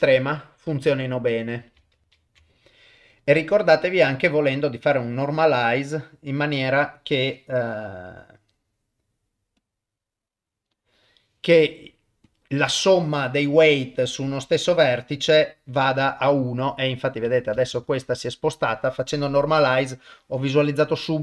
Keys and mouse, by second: 3.6-5.2 ctrl+alt+shift+drag, 8.1-9.7 drag, 12.3 click, 13.3-14.6 drag, 17.7 ctrl+z, 19.3 click.